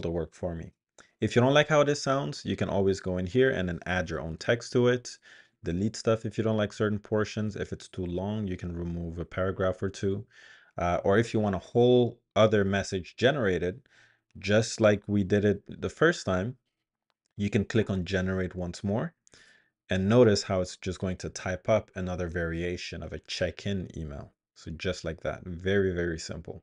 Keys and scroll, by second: 3.3-8.1 typing.